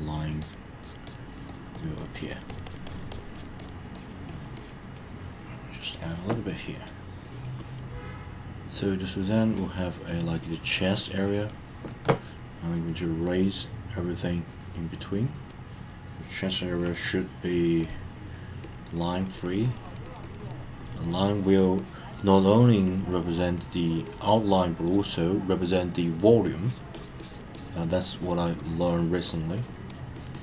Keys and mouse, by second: 0.4 click, 0.8 click, 1.0 click, 1.3 click, 1.5 click, 1.7 click, 2.0 click, 2.1 click, 2.3 click, 2.5 click, 2.6 click, 2.8 click, 3.1 click, 3.3 click, 3.6 click, 3.9 click, 4.3 click, 4.5 click, 4.9 middle click, 6.5 middle click, 7.2 click, 7.6 click, 9.3-11.5 drag, 14.4 click, 17.8 click, 18.6 click, 18.8 click, 18.9 click, 19.1 click, 19.3 click, 19.6 click, 19.8 click, 20.0 click, 20.2 click, 20.4 click, 20.8 click, 21.0 click, 21.4 click, 21.8 click, 22.2 click, 22.5 click, 22.8 click, 23.1 click, 23.3 click, 23.5 click, 23.8 click, 24.0 click, 24.3 click, 24.8 click, 25.6 click, 26.0 click, 26.6 click, 26.9 click, 27.2 click, 27.5 click, 28.1 click, 28.6 click, 29.2 click, 29.5 click, 29.9 click, 30.1 click, 30.3 click.